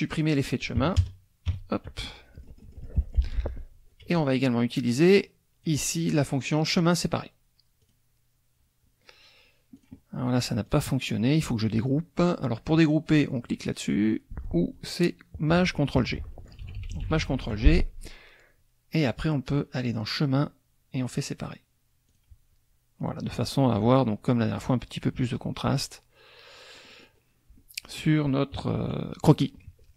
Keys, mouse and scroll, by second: 0.8 KP_Subtract, 1.0 KP_Add, 1.5 KP_5, 2.4 click, 3.2 F1, 3.2 scroll up 1, 4.0 KP_Subtract, 4.8-5.9 drag, 6.6 click, 7.8 click, 9.8 click, 10.7 click, 16.6 ctrl+shift+g, 19.8 click, 21.2 click, 22.1 click, 26.7 click, 28.5 KP_Subtract, 29.7 click.